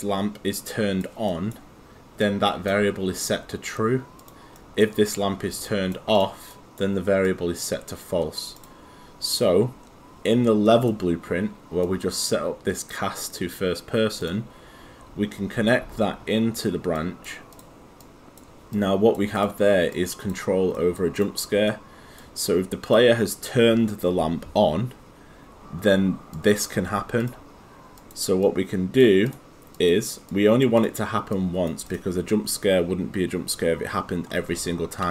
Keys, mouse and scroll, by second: 0.0 click, 1.3 right click, 2.2 click, 4.6 right click, 5.2 click, 6.5 right click, 7.3 click, 10.7 click, 20.8 right click, 21.2 click, 21.7 right click, 22.5 click, 26.3 click.